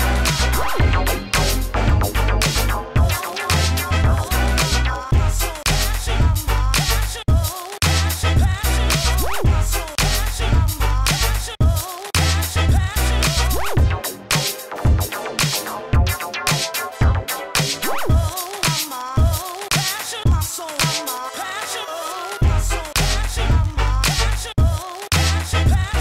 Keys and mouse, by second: 1.1 f, 3.9 f, 4.4 s, 4.6 f, 5.1-7.5 drag, 5.9-8.0 typing, 10.4-15.6 typing, 17.1 Tab, 17.5 Tab, 17.8 s, 18.6 s, 19.7 s, 20.9 s, 21.3 f, 21.7 s, 22.2 s, 23.9 KP_1, 24.8 s, 25.5 s.